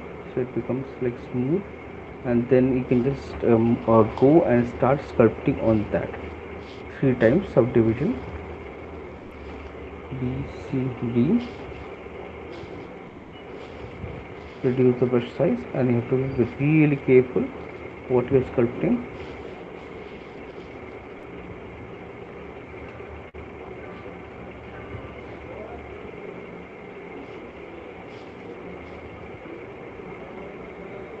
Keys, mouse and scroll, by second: 2.4 shift+click, 3.3 right click, 5.7 ctrl+d, 6.8 alt+click, 9.8 click, 10.2 right click, 10.2 b, 11.4 typing, 13.8 click, 14.6-15.2 [, 15.6 ], 16.4 ], 17.5 click, 18.9 click, 19.3 click, 19.9 ], 20.5 click, 20.7 click, 21.8 click, 22.0 click, 22.4 click, 22.8 click, 23.2 shift+click, 23.9 click, 24.1 shift+click, 24.3 shift+click, 24.5 shift+click, 24.7 click, 25.7 click, 26.9 click, 27.3 click, 28.8 click, 29.7 click, 30.5 click, 30.9 click.